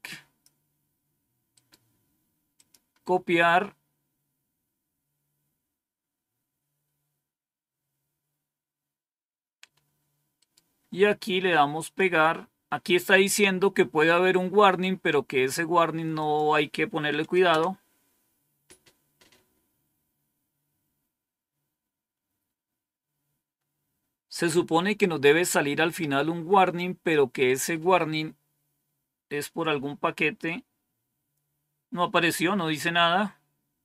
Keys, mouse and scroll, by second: 1.4 right click, 1.7 right click, 2.4 click, 3.3-9.6 scroll down 2, 10.2 right click, 11.7 click, 16.0 click, 17.3 Return.